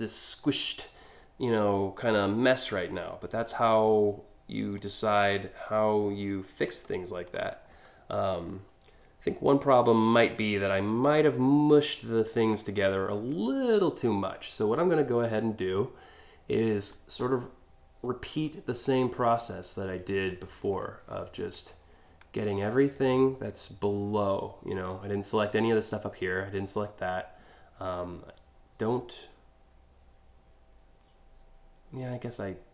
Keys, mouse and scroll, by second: 1.6 click, 2.4 alt+scroll up 1, 4.4 click, 6.2 drag, 6.9 click, 7.3 scroll down 1, 8.0 alt+scroll down 1, 12.7-13.6 scroll up 4, 16.5-19.9 drag, 21.1-22.2 shift+drag.